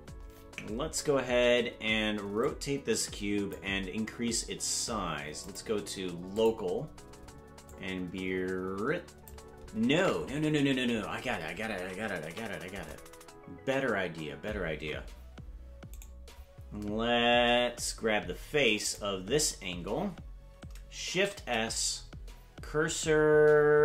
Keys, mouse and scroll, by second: 0.1-0.6 scroll up 6, 2.4-3.5 drag, 5.4-6.6 drag, 7.6-9.3 drag, 10.4 ctrl+z, 10.8-11.7 scroll up 8, 12.2 KP_Decimal, 14.8 Tab, 15.9 right click, 18.8 right click, 21.0 shift+s.